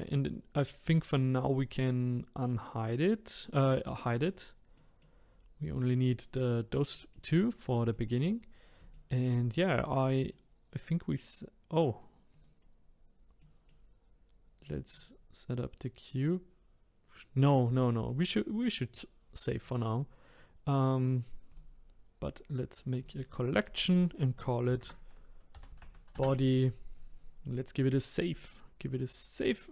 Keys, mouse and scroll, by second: 4.1 click, 4.7 middle click, 5.3-5.7 scroll up 3, 5.7-7.5 middle drag, 7.5-7.9 scroll down 1, 7.9-12.3 middle drag, 12.3 click, 13.4-14.9 middle drag, 14.9 click, 16.1 click, 17.9-19.6 middle drag, 19.6 click, 21.5-23.0 drag, 23.1-26.2 drag, 28.2-29.7 drag.